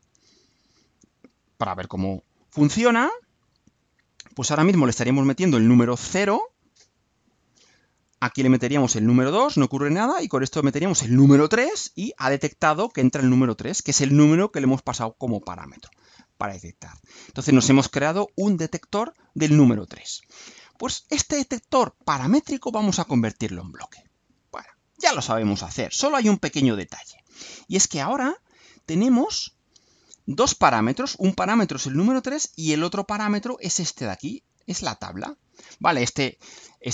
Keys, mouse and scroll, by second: 26.0 click, 27.1 scroll up 2, 27.5-29.1 right drag.